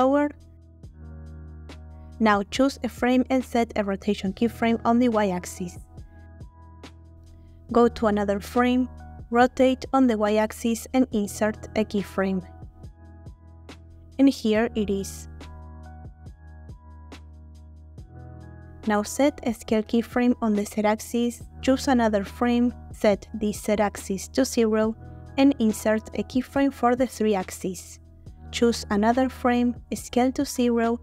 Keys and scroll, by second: 7.9 r, 8.1 y, 23.0 0, 23.3 Return, 28.7 Left, 28.8 Left, 29.1 Left, 30.5 s.